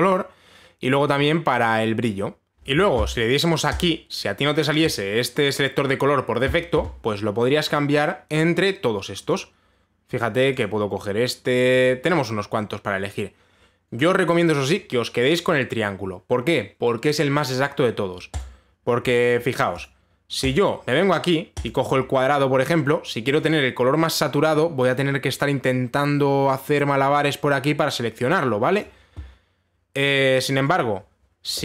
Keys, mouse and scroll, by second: 0.7 click, 4.4 click, 8.4 click, 9.9 click, 10.8 click, 11.2 click, 12.4 click, 19.0 click, 20.4 click, 21.1 click, 22.3 click, 29.4 click, 31.3 click.